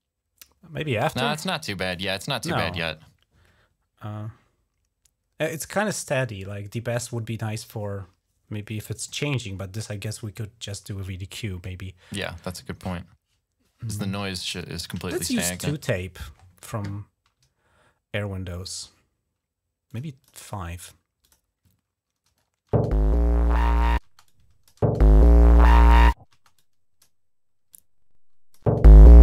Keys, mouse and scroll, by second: 1.7 click, 14.6-15.8 typing, 19.6 click, 20.0 click, 20.1 click, 21.0 click, 22.5 space, 23.8-24.6 typing, 24.0 click, 26.1 typing, 26.3 click, 27.5 click, 28.4 space.